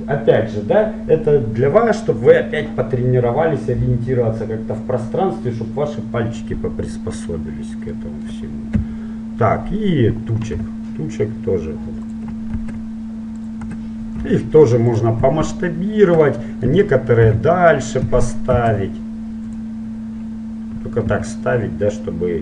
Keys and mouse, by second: 7.4 middle click, 8.9 KP_1, 10.8 g, 12.7 shift+d, 14.5 s, 16.6-17.6 middle drag, 17.4 KP_7, 18.7 shift+d, 21.3 g.